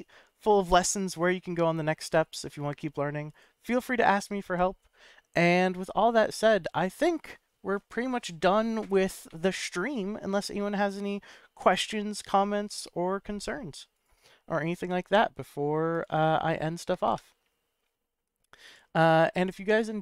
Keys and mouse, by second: 3.3 click, 4.2 KP_Decimal.